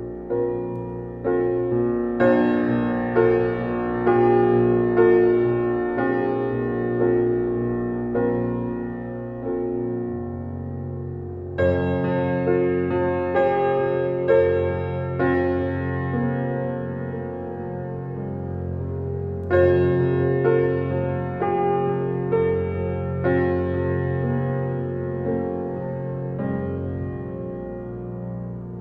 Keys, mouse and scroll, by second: 2.9-3.9 scroll up 1, 6.0-9.6 scroll up 1, 13.6 shift+click, 14.3 right click, 15.8 click, 16.2 scroll down 1, 17.0 click, 17.5-17.9 scroll down 1, 17.9 scroll up 1, 18.4 click, 20.7-21.1 scroll down 1, 21.4 ctrl+s, 21.9-22.3 scroll down 1, 22.9 click, 24.0-24.5 scroll down 1, 24.5 click, 25.3-27.0 typing, 27.2 Return, 27.8 click, 28.3-28.6 scroll up 1.